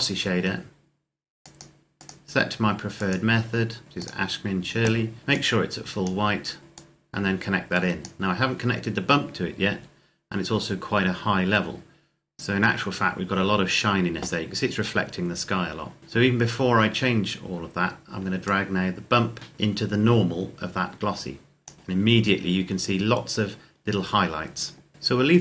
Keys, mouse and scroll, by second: 3.8 scroll up 1, 3.9 click, 11.8-12.7 scroll down 1, 12.7 scroll up 1, 18.5 click.